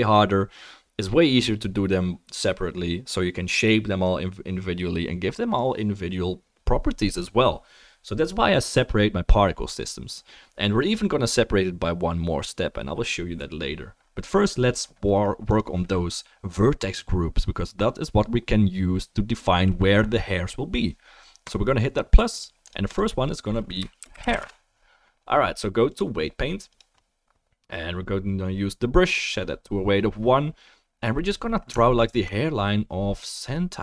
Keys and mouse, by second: 9.8-15.5 drag, 15.6-21.5 drag, 22.4 click, 22.7 click, 31.9 alt+middle click, 32.1-33.8 alt+middle drag.